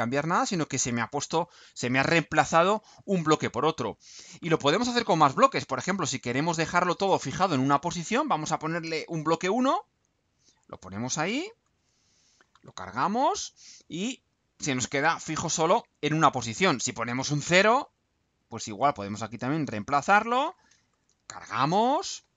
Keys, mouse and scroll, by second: 8.0 click, 10.1 click, 11.6 ctrl+u, 18.0 click, 19.8 click, 20.9 ctrl+u.